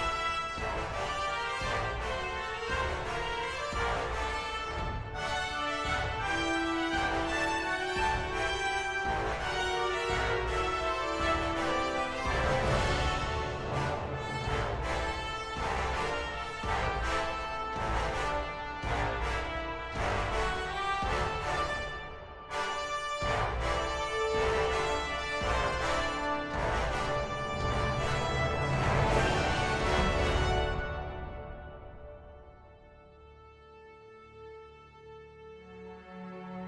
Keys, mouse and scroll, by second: 2.9 ctrl++, 3.4 ctrl+-, 3.9 ctrl++, 4.8 right click, 5.2 ctrl++, 5.8 right click, 7.4 ctrl++, 9.6 ctrl++, 13.3 ctrl+-, 18.4 ctrl+-, 20.0 ctrl+-, 20.2 ctrl+-, 21.3 ctrl+-.